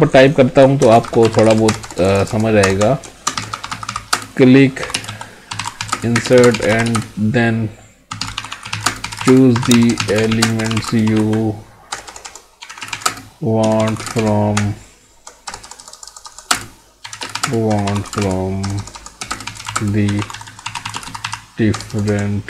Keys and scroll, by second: 4.1 space, 5.9 space, 6.4 space, 6.9 space, 8.8 space, 9.3 space, 10.4 space, 11.0 space, 13.0 space, 14.0 space, 17.4 space, 18.1 space, 19.3 space, 19.8 space.